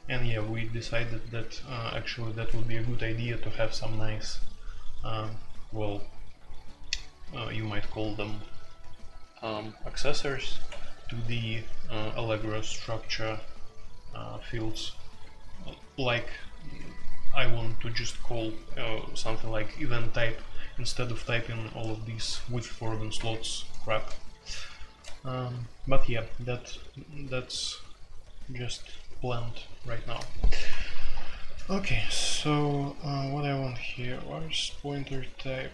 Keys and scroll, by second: 0.2 Escape, 1.7 a, 10.6 Escape, 14.8 typing, 16.0 typing, 20.7-21.0 typing, 22.1-23.1 typing.